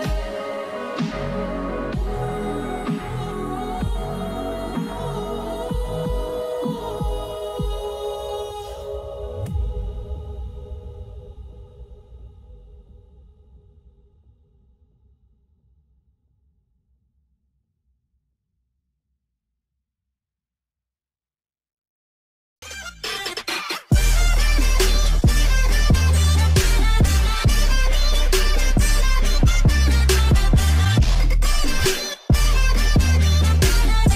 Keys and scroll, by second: 1.7 g, 9.4 h.